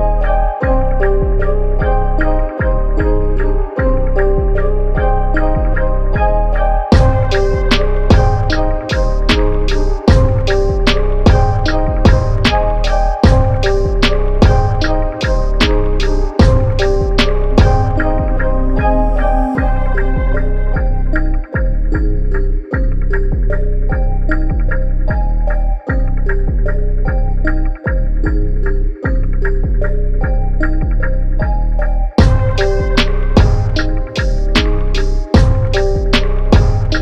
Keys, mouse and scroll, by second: 0.8 shift+Tab, 2.4 click, 4.2 Tab, 6.1 click, 10.4 Tab, 12.0-12.9 typing, 12.9 click, 13.8 Tab, 15.4 click, 15.4 typing, 17.9 Tab, 19.1 click, 20.3 typing, 20.7 click, 22.4 Tab, 23.5 click, 25.6 Tab, 26.4-34.7 drag, 35.2 Tab, 36.6-37.0 drag.